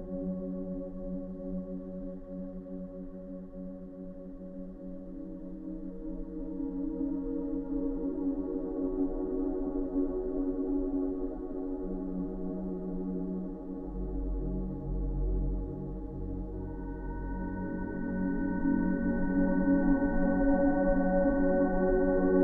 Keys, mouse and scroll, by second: 1.5-2.5 drag, 5.0 right click, 5.6 click, 6.1 scroll up 1, 6.4-7.6 scroll down 2, 7.6-9.5 drag, 10.9-12.2 drag, 18.0 scroll up 1, 19.0 scroll up 1, 19.1 scroll down 2, 20.2 scroll down 1, 21.6-22.4 drag.